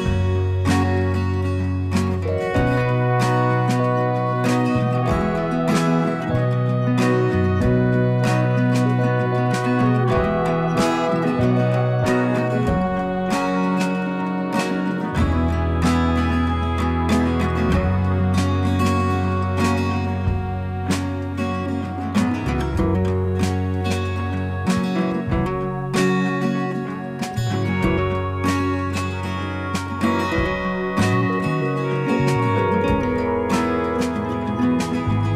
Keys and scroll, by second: 5.3 ctrl+a, 5.8 typing, 6.3 Return, 7.4 typing, 10.0 ctrl+a, 10.3-11.1 typing, 13.0 ctrl+a, 13.1-15.6 typing, 16.6 ctrl+a, 17.1-18.8 typing.